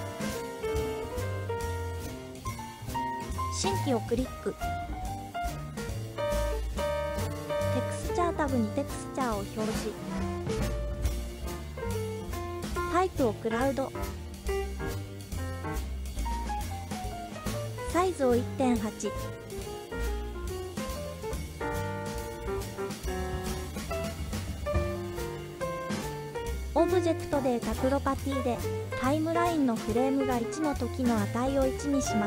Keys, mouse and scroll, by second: 1.2-1.6 scroll down 1, 2.6 scroll down 1, 5.1 click, 8.1 click, 13.5-15.1 drag, 15.9-19.0 drag, 20.1 click, 20.5-22.8 drag, 24.7 click, 26.7 click, 30.0-31.1 drag.